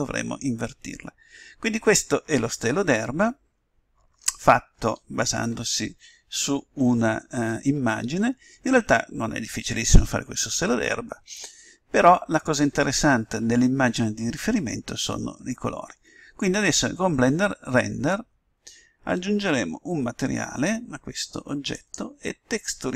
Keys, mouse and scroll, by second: 5.5 KP_7, 9.8-16.3 middle drag, 21.7-22.9 drag.